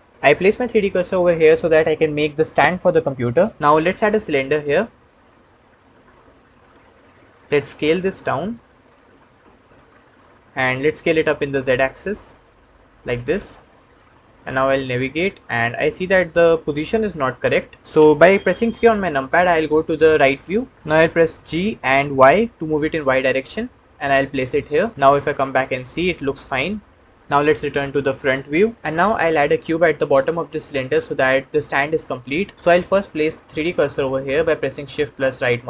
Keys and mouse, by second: 3.8 shift+a, 7.6 s, 9.4 click, 10.5 s, 10.7 z, 13.7-17.8 middle drag, 20.1 KP_3, 21.3 g, 22.4 y, 24.9-27.2 middle drag, 28.4 KP_1, 34.8 shift+click, 34.8 shift+middle click.